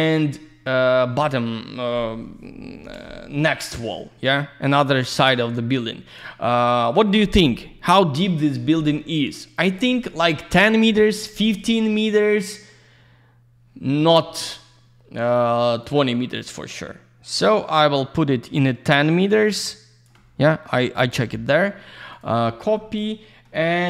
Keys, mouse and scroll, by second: 1.6 middle click, 3.0 scroll down 1, 5.0 middle click, 15.8 shift+click, 22.1 click.